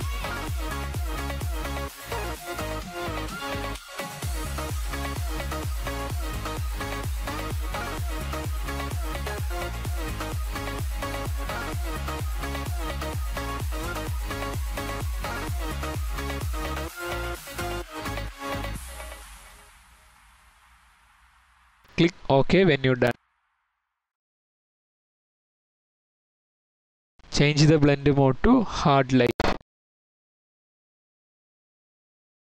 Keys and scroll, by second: 0.0-0.1 typing, 2.1-3.2 typing, 5.1-5.8 typing.